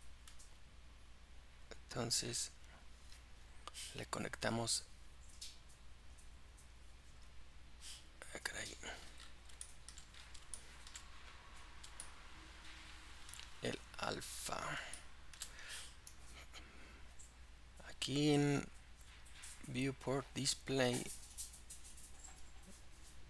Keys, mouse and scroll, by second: 7.1-16.5 drag.